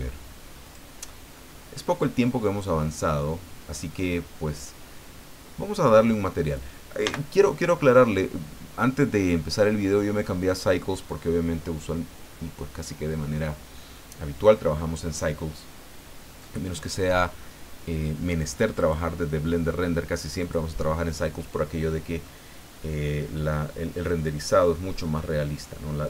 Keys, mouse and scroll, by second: 0.6 click, 1.3-4.0 middle drag, 7.0 n, 18.7 click, 20.4 click, 22.2-23.5 middle drag.